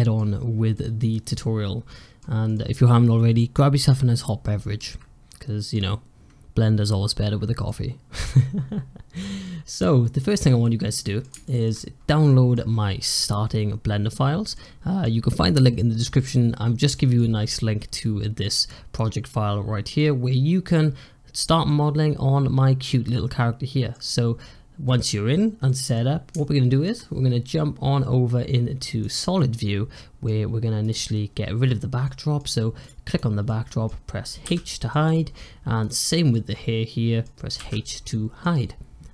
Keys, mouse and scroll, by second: 0.3-0.7 scroll up 2, 0.7-2.1 middle drag, 2.1-2.5 scroll down 2, 2.5-4.4 middle drag, 4.4 scroll up 2, 4.7-9.5 middle drag, 9.5 scroll down 2, 9.7-10.2 middle drag, 10.2-10.5 scroll up 3, 10.5-11.9 middle drag, 11.9-12.2 scroll down 3, 12.2-14.2 middle drag, 14.2 scroll down 2, 14.4-16.4 middle drag, 16.4-16.9 scroll up 2, 16.9-21.2 middle drag, 21.2-21.6 scroll up 3, 21.6-24.5 middle drag, 24.5 scroll up 2, 24.7-25.3 middle drag, 25.3 scroll down 1, 25.6 middle click, 25.9-26.5 scroll up 2, 26.5-29.0 shift+middle drag, 29.0 click, 29.2-30.7 middle drag, 30.7 click, 31.1-31.9 scroll down 4, 31.9-32.7 middle drag, 32.7 drag, 33.0 click, 33.4-34.3 middle drag, 34.3 h, 34.8-35.1 middle drag, 35.1-35.7 scroll up 3, 35.7 click, 36.0 scroll down 1, 36.2-37.5 middle drag, 37.5 h, 38.0-39.1 middle drag.